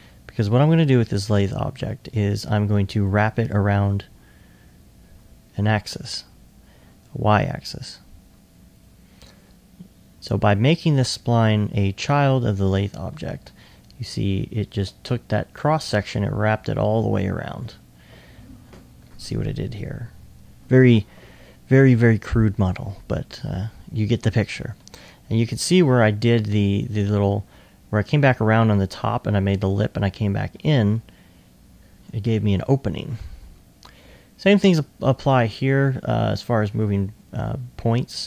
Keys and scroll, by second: 12.7 s, 14.5 alt+s, 18.9 2, 20.2-21.0 typing, 23.0 s, 24.5 typing.